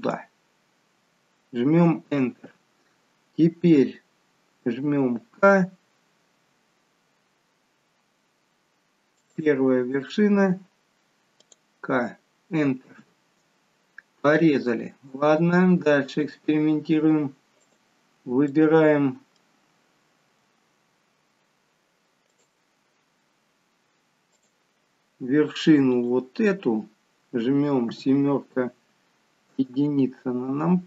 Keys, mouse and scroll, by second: 5.3 k, 14.8 click, 16.2 click, 18.5 middle click, 22.3 click, 24.3 click, 27.9 KP_7, 29.5 KP_1.